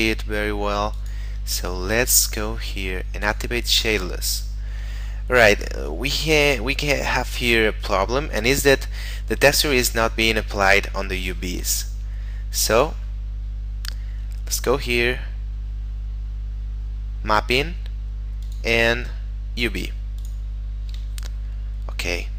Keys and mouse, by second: 1.0 click, 2.1 middle click, 3.3 click, 4.7 shift+middle click, 7.7 shift+middle click, 12.0 middle click, 12.8 click, 13.4 middle click, 18.5 click, 21.2 shift+middle click.